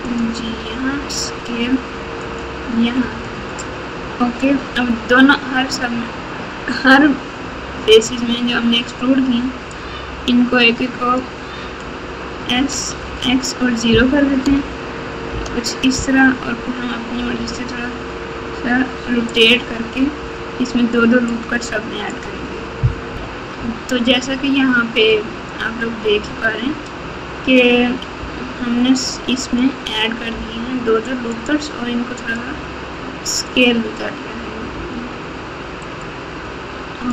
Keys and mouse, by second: 0.8 s, 3.1 alt+z, 8.0 alt+z, 9.7 click, 11.0 click, 12.5 s, 17.1 r, 21.5 click, 23.1 KP_Multiply, 25.3-27.0 drag, 29.0 g, 30.3 r, 32.3-33.4 drag, 34.7 g.